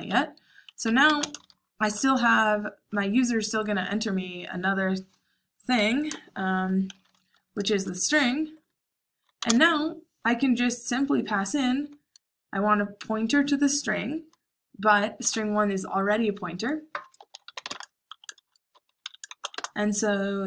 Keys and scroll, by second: 0.0-1.7 typing, 6.6-8.1 typing, 9.2-9.9 typing, 17.1-19.2 typing.